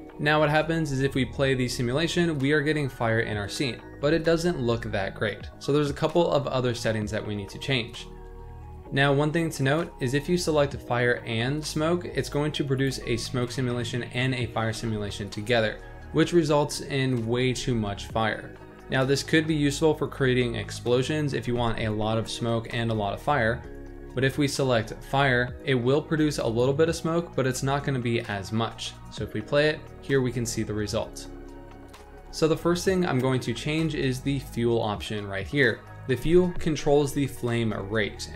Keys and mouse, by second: 0.8 space, 1.6-3.5 middle drag, 9.5-11.7 drag, 12.7 click, 14.7 space, 15.4-15.8 middle drag, 17.5 space, 24.2-25.2 drag, 26.4 click, 28.6 space, 29.3-32.3 middle drag, 32.3 space.